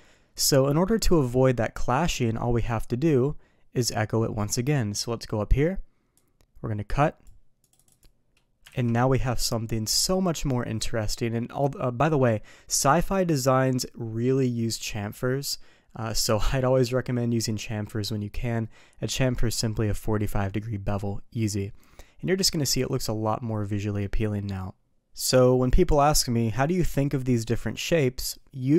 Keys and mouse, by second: 0.3 click, 6.2-7.2 drag, 8.7 alt+a, 22.3-24.0 middle drag.